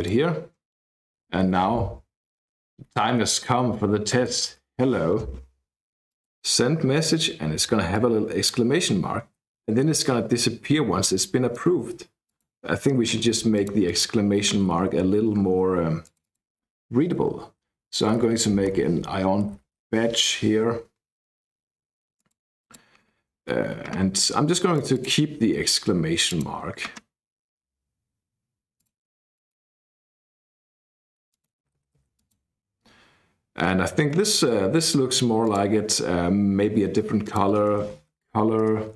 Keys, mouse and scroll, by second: 3.5-5.0 typing, 6.0 click, 7.9 click, 12.3 click, 13.5 click, 16.0 click, 17.8-19.7 typing, 20.0 Escape, 22.1 click, 22.6 click, 24.7 click, 26.2 click, 29.0 click, 29.3 click, 31.3 click, 31.6 a, 31.7 a, 32.1 click, 32.1 a, 35.6 click, 37.2 click, 37.7-38.9 typing, 38.6 Return.